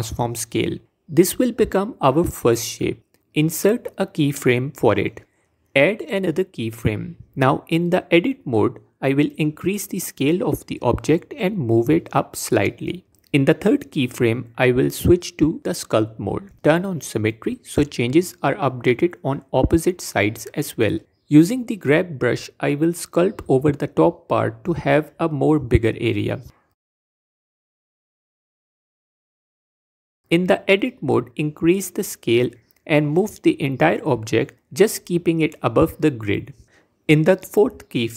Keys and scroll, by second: 1.0 ctrl+a, 8.3 Tab, 13.1 Tab, 15.1 Tab, 19.4 g, 21.0 q, 30.4 Tab, 34.8 Tab.